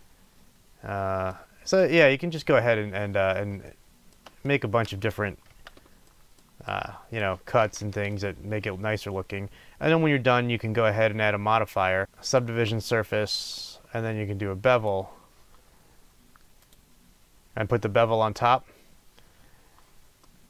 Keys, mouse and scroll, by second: 0.4-2.3 middle drag, 5.5 Tab, 5.5-12.0 middle drag, 7.4-8.1 scroll down 2, 9.6-11.3 scroll up 2, 11.3-12.0 scroll up 1, 12.0-19.6 drag, 20.2-20.4 middle drag.